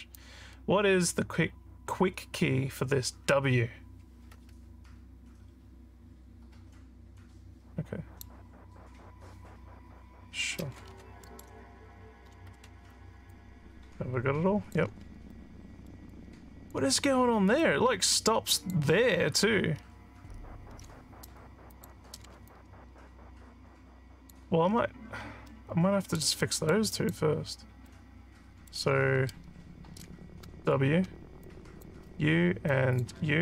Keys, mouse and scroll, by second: 0.2-8.2 drag, 11.3 alt+middle click, 13.4-14.7 alt+drag, 15.3 alt+middle click, 16.1 alt+click, 17.6-18.7 alt+drag, 19.7 alt+scroll up 2, 20.3 alt+scroll up 2, 21.7 click, 22.5-24.4 alt+drag, 24.7-25.3 scroll up 6, 25.5 alt+middle click, 26.4 alt+middle click, 26.9 alt+click, 27.5 scroll up 2, 27.9 alt+middle click, 31.4 click, 32.7 shift+click.